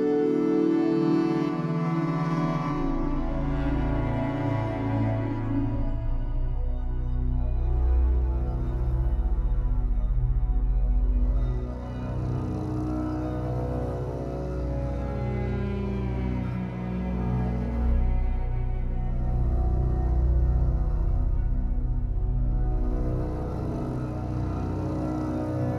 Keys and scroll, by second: 0.1 1, 7.8 w, 15.3 Escape, 15.6 2, 20.4 Escape, 20.7 2, 23.0 Up.